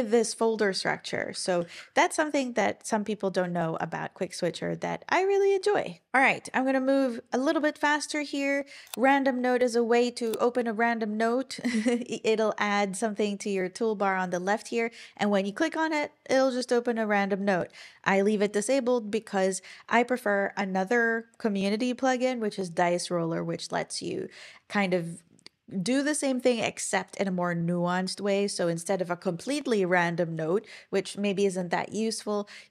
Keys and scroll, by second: 1.6 ctrl+super+l.